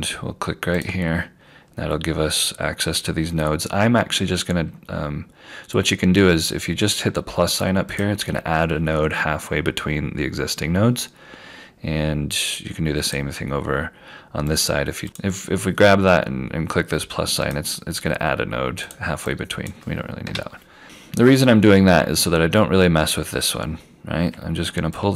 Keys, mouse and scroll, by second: 0.8 click, 8.0 click, 11.3 scroll down 1, 13.2 click, 15.0-16.4 scroll down 1, 16.4 click, 20.3 Delete, 20.8 scroll down 1, 25.0 click.